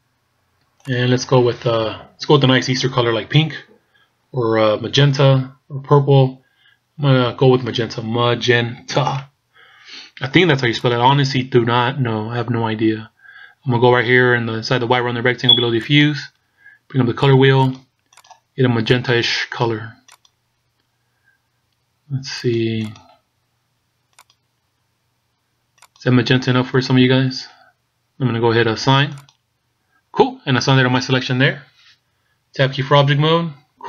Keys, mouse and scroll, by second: 0.9 click, 15.9 click, 29.3 click, 31.4-32.3 scroll down 2, 33.0 Tab, 33.7-33.8 scroll down 4.